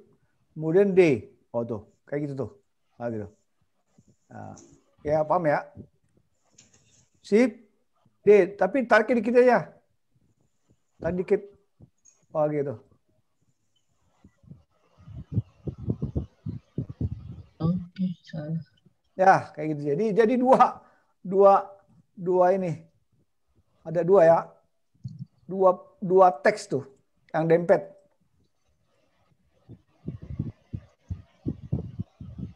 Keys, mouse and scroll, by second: 1.3 shift+d, 9.5 shift+d, 22.0 middle click, 24.5 middle click, 28.0 middle click, 30.0 click.